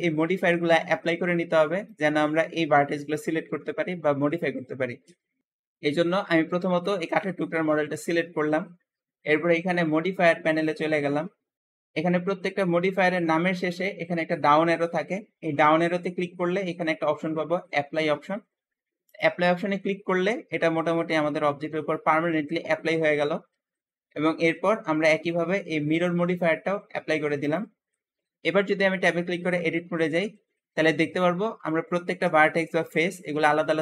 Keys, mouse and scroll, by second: 5.2 Escape, 5.9 click, 6.5-6.8 scroll down 2, 6.8 g, 6.9 g, 8.1-8.7 scroll up 2, 10.4-11.6 drag, 13.5-16.6 drag, 25.7-28.1 drag, 28.1-28.7 scroll down 3, 29.0-29.4 scroll up 4, 29.4 Tab, 29.7 Tab, 29.8-30.2 scroll down 2, 30.4 alt+z, 30.7-33.7 alt+middle drag, 32.4 z.